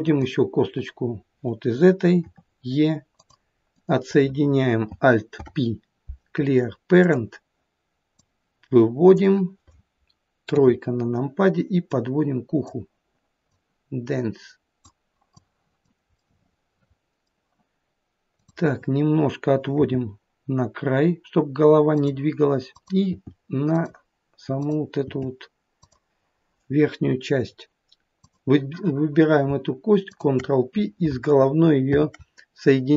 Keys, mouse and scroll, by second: 0.1 click, 2.2 e, 3.8 click, 5.4 alt+p, 8.2 click, 10.5 KP_3, 11.9 click, 13.6 click, 16.2 middle click, 18.4 click, 19.8 g, 22.7 click, 23.2 g, 24.6 click, 25.1 g, 28.2 click, 30.1 shift+click, 31.9 ctrl+p.